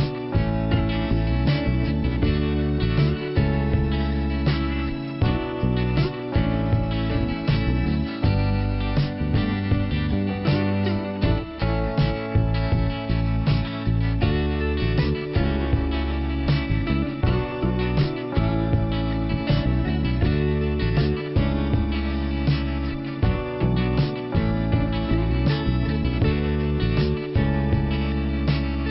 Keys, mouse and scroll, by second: 1.2 click, 2.3 click, 3.3 click, 4.3 click, 4.3 click, 6.5 click, 7.9 click, 10.2 scroll down 1, 13.5 click, 13.7 click, 15.0 click, 15.1 click, 17.2 click, 17.3 click, 20.5 click, 22.1 click, 24.2 click, 24.3 click.